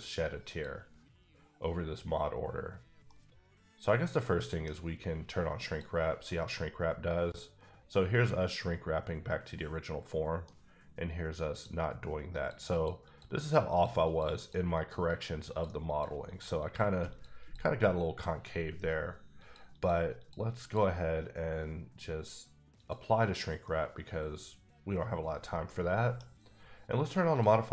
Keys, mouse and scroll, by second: 1.6 click, 3.0 middle click, 5.7 click, 6.3 middle click, 11.5 click, 12.7 click, 13.0 click, 13.4 double click, 13.7 click, 14.0 click, 14.4 double click, 14.7 click, 15.0 double click, 15.5 click, 15.9 click, 16.2 click, 16.6 click, 17.1 click, 17.4 click, 19.5 click, 19.7 double click, 20.2 click, 20.6 click, 22.9 click, 23.6-25.8 middle drag, 25.8 middle click, 26.4 middle click, 27.3 click.